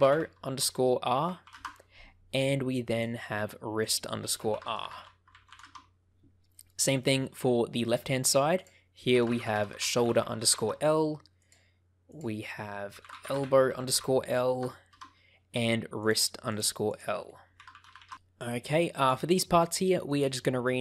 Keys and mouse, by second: 3.7-5.9 drag, 6.5 middle click, 7.2 middle click, 8.6-10.9 drag, 11.3 click, 12.2-15.2 drag, 16.0 click, 16.4 click, 16.9-18.1 drag, 20.0 click.